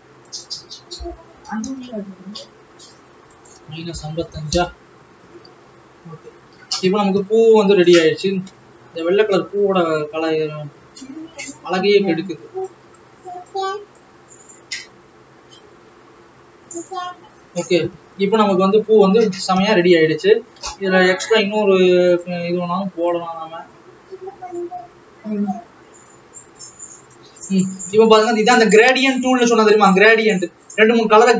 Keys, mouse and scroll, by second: 4.7 KP_5, 6.3-6.8 scroll down 3, 7.2 alt+a, 11.3-17.3 drag, 17.3-18.2 scroll up 7, 18.5 ctrl+s, 18.6 alt+a, 18.7 scroll down 3, 19.9 ctrl+s, 23.0-26.5 drag, 27.9-28.8 scroll up 4.